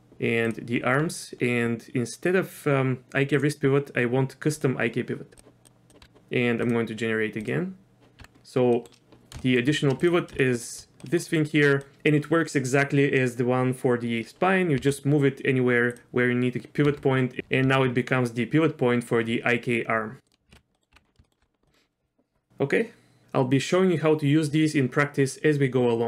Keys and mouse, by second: 0.5 drag, 3.4 click, 4.6 click, 5.9 click, 6.0 q, 7.5 click, 8.2 Tab, 8.8 middle click, 9.4 shift+middle drag, 10.0-10.4 drag, 10.3-10.7 shift+middle drag, 11.0 middle click, 11.9 middle click, 14.8 g, 16.9 r, 17.4 ctrl+z, 17.7 r, 20.5 ctrl+z, 20.8 click, 20.9 Tab, 21.3 shift+middle click, 21.7 middle click.